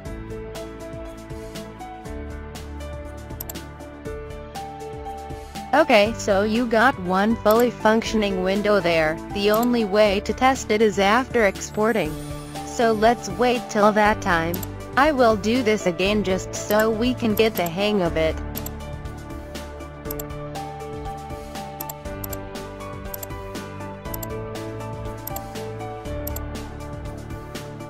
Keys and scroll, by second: 0.3 o, 2.1 f.